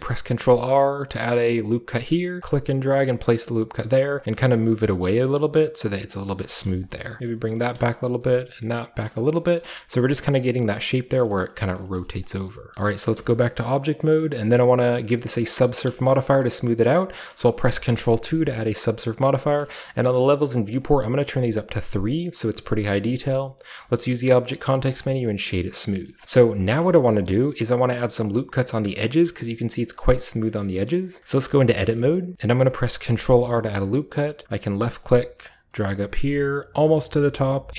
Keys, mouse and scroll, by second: 0.1 ctrl+r, 2.4-4.0 drag, 4.2 click, 4.2 b, 4.4 r, 4.5 click, 4.6 g, 5.3 click, 6.4-8.2 typing, 6.8 click, 7.8 click, 8.9 click, 9.2 middle click, 9.2-11.1 scroll down 1, 9.4-11.3 middle drag, 9.6 typing, 11.1 scroll down 1, 11.4 middle click, 11.8 shift+middle click, 12.0 shift+middle click, 12.1 shift+scroll down 1, 12.3-12.7 shift+scroll up 1, 12.7 s, 12.8-17.7 shift+middle drag, 13.9-15.6 shift+scroll down 1, 15.6-16.8 scroll up 3, 16.8-17.3 shift+scroll up 1, 17.3-18.4 shift+scroll up 1, 17.7 ctrl+2, 18.7-20.8 ctrl+middle drag, 18.7-19.5 ctrl+scroll down 2, 19.5-20.6 ctrl+scroll down 1, 20.6 scroll down 1, 20.8 click, 21.5 click, 22.5 scroll down 1, 23.3-23.8 scroll up 1, 23.3-24.9 middle drag, 23.8 scroll up 1, 23.8 w, 24.9 click, 25.3 drag, 25.3-25.9 scroll down 1, 25.5-28.8 shift+middle drag, 25.9-28.8 shift+scroll up 1, 26.2 KP_5, 28.8-30.5 scroll down 1, 29.2-30.5 middle drag, 30.6 middle click, 31.3 Tab, 31.7 shift+middle click, 32.0 shift+middle click, 32.5-34.4 shift+scroll up 1, 33.0 ctrl+r, 34.4-35.0 ctrl+scroll up 1, 35.0-37.7 drag.